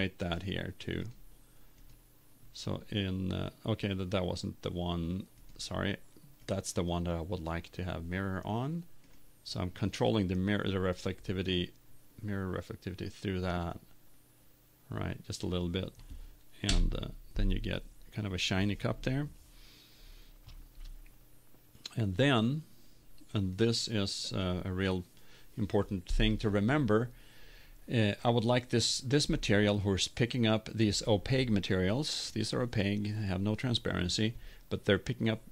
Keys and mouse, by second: 1.4 click, 2.5-3.9 drag, 16.6 middle click, 17.8 click.